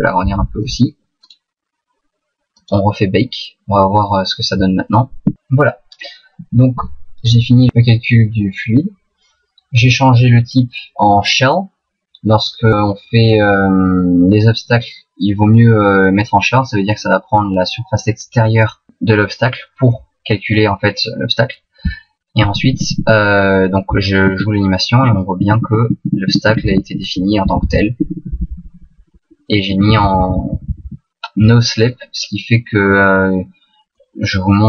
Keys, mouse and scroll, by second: 0.8 click, 1.3 right click, 2.6 click, 6.4 Right, 27.4 Right, 27.6 Right.